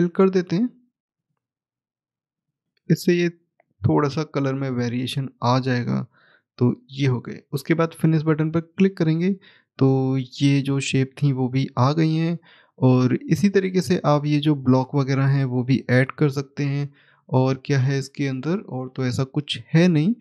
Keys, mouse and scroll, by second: 6.0 click, 9.6-10.2 scroll down 1, 10.2 click, 10.8 middle click, 13.2-16.2 scroll up 1, 16.4 middle click, 20.0 middle click.